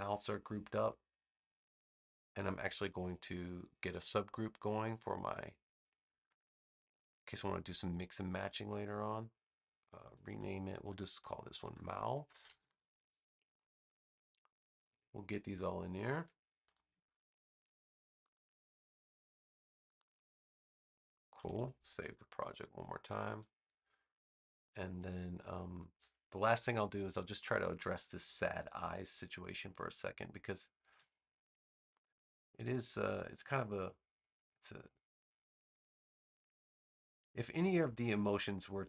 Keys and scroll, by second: 11.2-13.0 typing, 21.4 super+s.